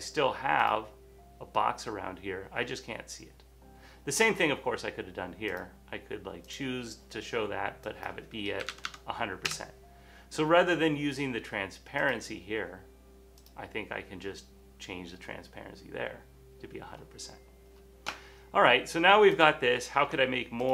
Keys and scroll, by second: 0.4-1.2 typing, 8.5-10.8 typing, 12.1-12.8 typing.